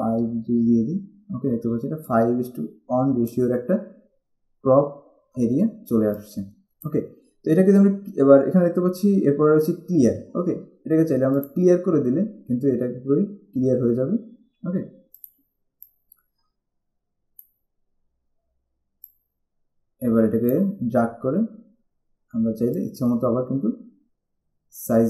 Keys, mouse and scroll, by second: 0.9 5, 2.2 click, 6.3 click, 11.6 click, 15.4 click, 19.2 click, 20.9 scroll down 1, 22.8 click.